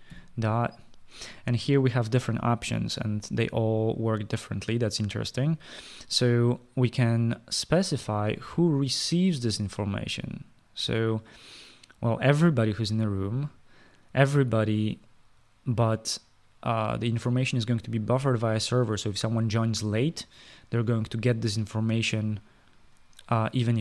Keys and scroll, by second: 0.9 ..